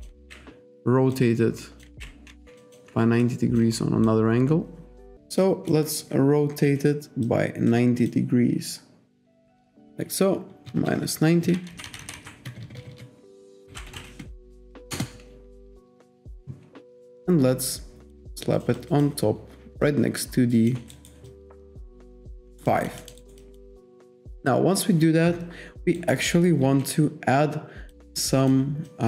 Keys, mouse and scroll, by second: 0.2 ctrl+z, 1.2 click, 1.9 ctrl+z, 2.3 w, 2.6 alt+click, 3.3 click, 4.1 click, 5.5 click, 6.7 e, 7.3 click, 9.3 click, 10.7 BackSpace, 11.7 Right, 12.5 BackSpace, 13.7-14.5 typing, 15.0 Return, 16.3 w, 17.1 click, 18.8 click, 19.9 click, 21.0 alt+right click, 21.3 alt+click, 22.5 alt+right click, 22.7 alt+click, 23.2 alt+right click, 23.5 alt+click, 26.0 alt+right click, 26.3 alt+click, 28.1 alt+right click, 28.9 alt+click.